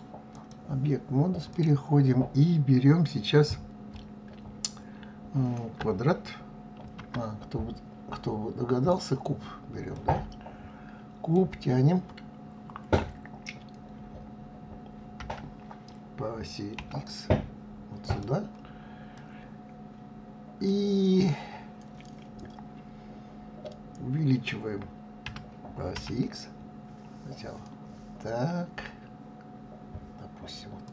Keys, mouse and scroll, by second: 6.4 shift+a, 9.6-12.5 middle drag, 14.8 g, 18.8-21.8 middle drag, 24.9 s.